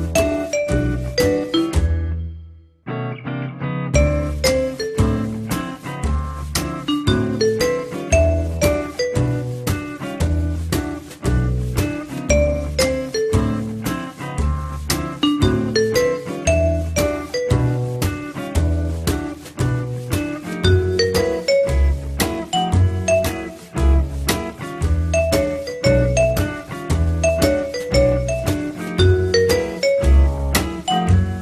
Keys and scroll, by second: 25.4 Delete.